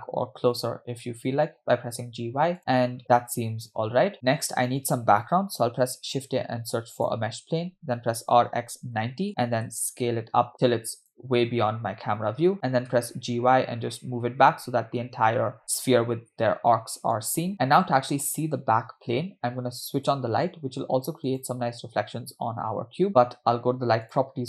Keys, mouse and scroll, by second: 2.6 space, 5.8 shift+a, 8.2 r, 9.7 s, 12.7 g, 20.2 click, 21.5 click, 24.1 click.